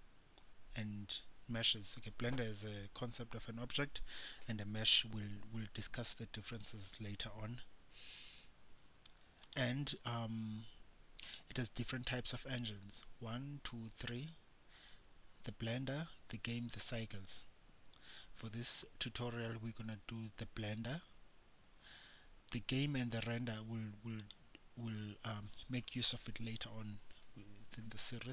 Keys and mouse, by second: 9.6-28.3 drag.